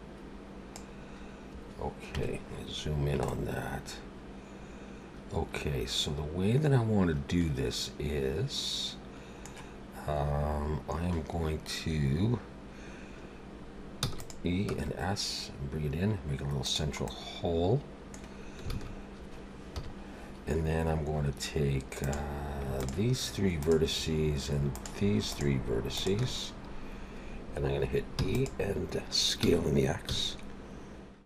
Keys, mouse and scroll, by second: 2.1 KP_Decimal, 2.9-4.2 scroll down 3, 3.3 middle click, 14.0 e, 14.7 s, 17.6 middle click, 18.7 alt+a, 19.7 KP_7, 22.0 click, 22.7 shift+click, 23.5 shift+click, 24.7 shift+click, 25.3 shift+click, 26.3 shift+click, 28.2 e, 29.4 s.